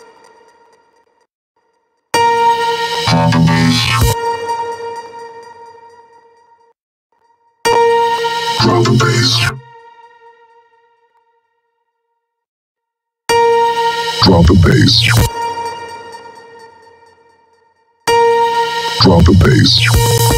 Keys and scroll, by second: 1.5 space, 3.7 space, 7.8 space, 13.0 space, 14.8 space, 18.3 space.